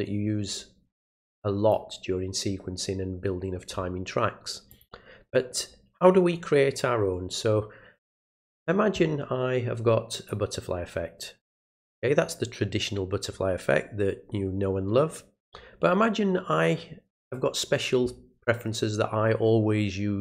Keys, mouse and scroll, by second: 4.7 click, 8.3 click, 10.3-11.6 drag.